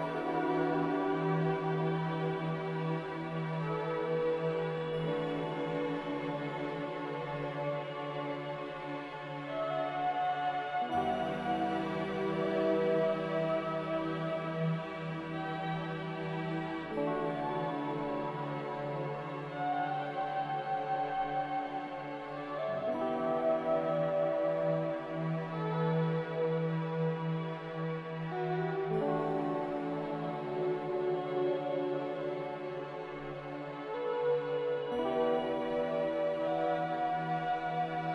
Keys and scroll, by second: 14.1 typing, 15.4 Return, 36.8 z.